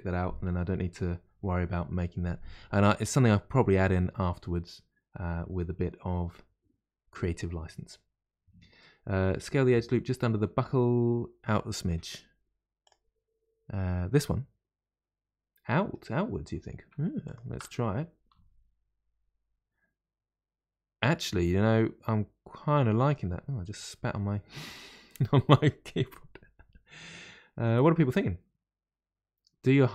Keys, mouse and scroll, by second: 12.8 click, 14.1-17.1 middle drag, 17.2 alt+click, 18.3 s, 18.4 s.